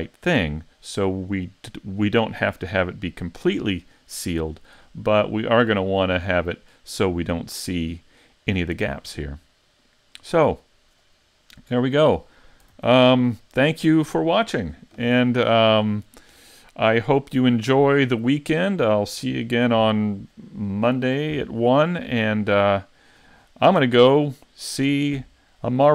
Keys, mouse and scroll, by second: 5.3 middle click, 9.3 middle click, 12.8 s, 13.5-16.0 scroll up 1.